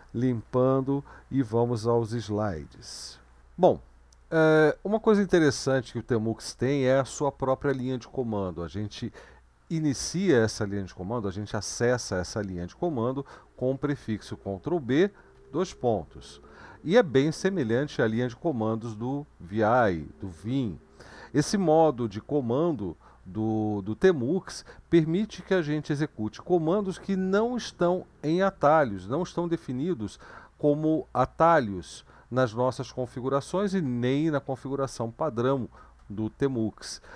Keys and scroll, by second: 0.5 ctrl+l, 2.6 super+1, 14.3 ctrl+b, 15.4 :.